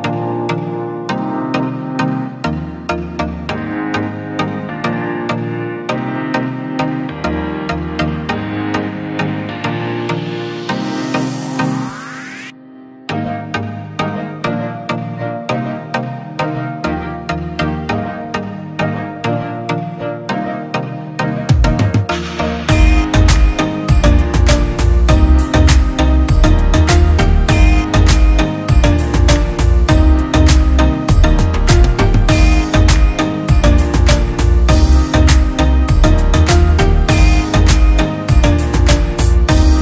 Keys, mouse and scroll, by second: 0.5 shift+click, 3.1 Escape, 3.4 click, 5.2 ctrl+l, 5.8 Escape, 6.8 F6, 7.4 ctrl+click, 8.0 space, 9.1 click, 10.4 Tab, 12.9 shift+click, 13.2-14.1 typing, 14.2 click, 14.5-14.8 right click, 15.5 shift+click, 16.3-17.4 typing, 17.8 click, 21.3 Escape, 21.6 click, 22.0 shift+click, 24.0 click, 24.4 Escape, 24.8 click, 25.3 Delete, 26.2 F6, 26.9 F2, 27.3-30.4 drag, 30.5 F2, 30.6 click, 31.0 space, 32.0-33.0 click, 32.8 F3, 34.2-34.8 shift+drag, 36.4 e, 36.7 Escape, 37.1-37.8 click, 37.8 F2, 38.4 ctrl+z, 38.7 F2, 39.0 click, 39.4 Escape.